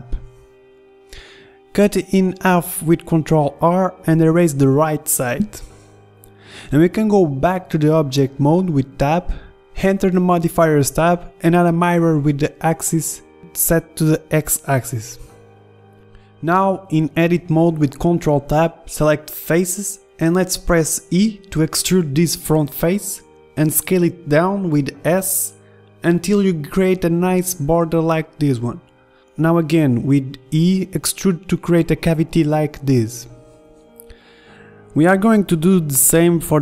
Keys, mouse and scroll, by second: 0.5 middle click, 0.6 Tab, 1.7 ctrl+r, 2.8 a, 3.1 b, 3.8 Delete, 4.5 a, 4.9 a, 5.1 b, 6.0-8.0 drag, 8.3 Tab, 9.0-11.4 drag, 11.6-13.7 middle drag, 15.9 KP_1, 17.5 ctrl+Tab, 20.9 e, 29.3-30.8 middle drag, 30.4 e, 32.4 z, 34.8 KP_1.